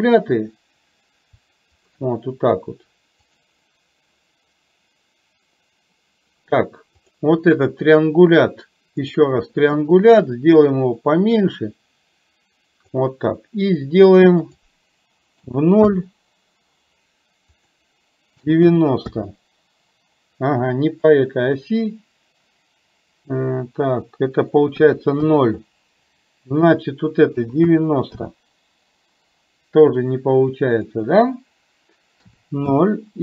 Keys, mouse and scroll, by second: 1.8 shift+click, 3.3 click, 7.0 click, 10.6-13.0 drag, 14.3-16.1 drag, 17.6-19.2 drag, 21.0-25.3 drag, 26.7-28.3 drag, 31.0-32.8 drag.